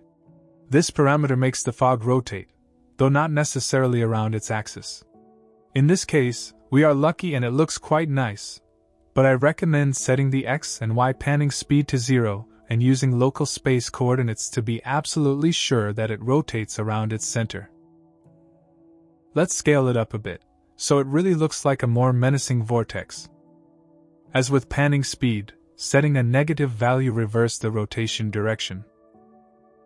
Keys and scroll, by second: 14.9 KP_0, 16.3 KP_0, 18.9-19.9 typing, 22.8 g.